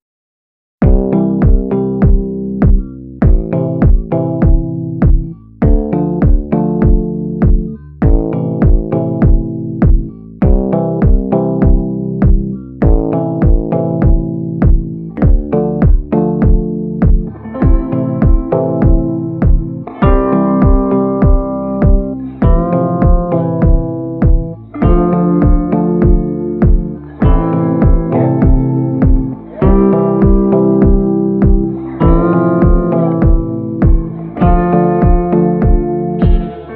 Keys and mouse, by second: 0.6 middle click, 2.0 a, 2.4 middle click, 2.9 shift+middle click, 3.2 middle click, 5.6 middle click, 7.3 shift+middle click, 7.6 middle click, 8.1 shift+middle click, 8.8 shift+middle click, 9.5 shift+middle click, 9.6 shift+click, 10.5 middle click, 11.4 shift+middle click, 12.5 middle click, 17.8 shift+middle click, 18.5 middle click, 19.8 middle click, 21.4 shift+middle click, 22.2 shift+middle click, 22.4 click, 22.9 ctrl+i, 23.9 b, 26.2 b, 27.1 middle click, 27.8 shift+middle click, 28.2 b, 29.1 shift+middle click, 29.6 middle click, 30.0 shift+middle click, 30.5 b, 31.5 b, 33.2 middle click, 33.6 shift+middle click, 33.9 middle click, 34.2 b, 35.4 b, 36.1 b.